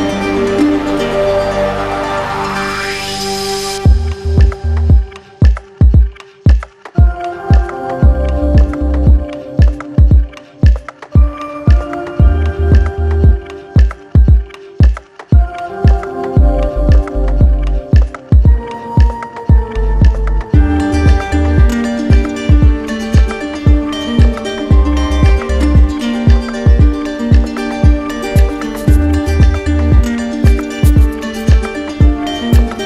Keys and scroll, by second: 0.4 ctrl+alt+z.